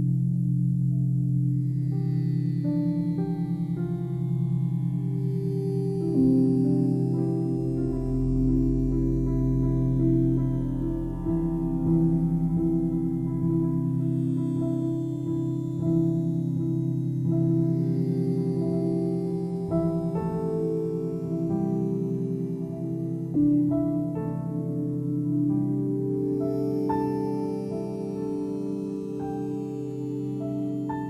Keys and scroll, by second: 6.5 ctrl+i, 8.4 ctrl+d, 15.4 space.